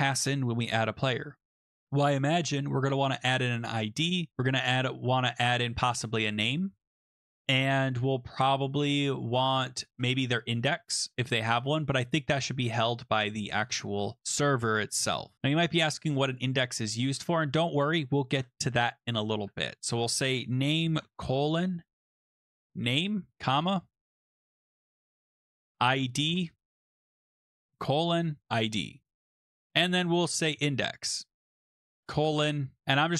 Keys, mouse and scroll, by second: 3.2 typing, 5.5-6.6 typing, 9.6-11.5 typing, 16.3 click, 18.3-33.1 typing, 24.8 Return, 27.1 Right.